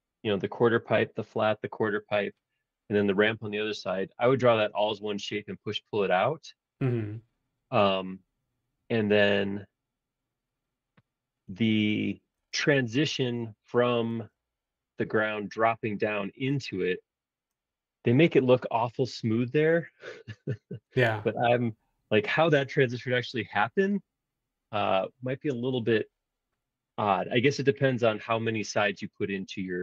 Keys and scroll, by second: 12.5 super+Tab, 14.1 super+Tab.